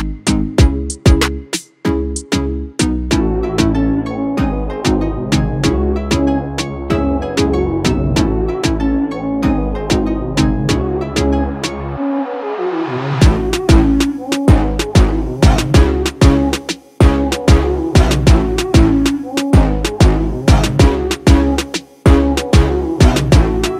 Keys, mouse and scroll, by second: 2.9 click, 7.4 click, 10.1 click, 15.8 click, 19.9-23.7 drag.